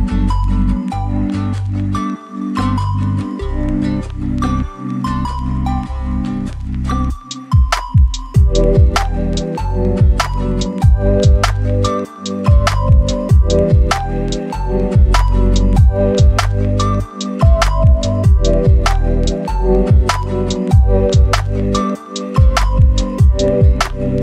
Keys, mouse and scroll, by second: 1.1 scroll down 1, 1.2 right click, 1.6-2.4 scroll up 1, 2.4 click, 2.8 scroll down 1, 2.9 right click, 3.3-3.9 scroll up 2, 3.5 right click, 4.1 click, 4.8 right click, 5.7 click, 6.0 scroll down 1, 6.1-8.0 right drag, 8.1 scroll up 1, 8.3 right click, 8.6 scroll up 1, 9.4 click, 10.2 scroll down 1, 10.3 right click, 10.7 scroll up 1, 10.8 right click, 11.8 scroll up 1, 12.1 click, 12.8 scroll down 1, 12.9 right click, 13.3 scroll down 1, 13.4-15.6 scroll up 2, 13.5 right click, 15.6 click, 16.0 scroll down 1, 16.1 right click, 16.9-18.2 scroll up 2, 17.0 right click, 18.2 click, 19.0 right click, 19.6 scroll down 1, 19.7 scroll up 1, 19.9 right click, 20.1 scroll down 1, 20.4 right click, 21.2 click, 21.5-23.5 right drag, 23.6 scroll up 1, 23.9 click.